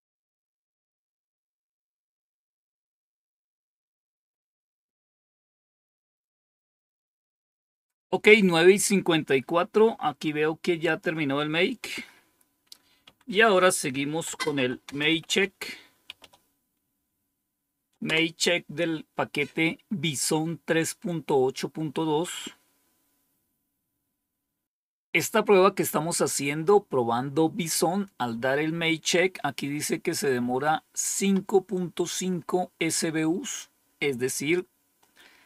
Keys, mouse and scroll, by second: 10.7 click, 11.7 Home, 12.9 End, 13.9-16.6 typing, 17.9 Return, 33.4-35.0 drag.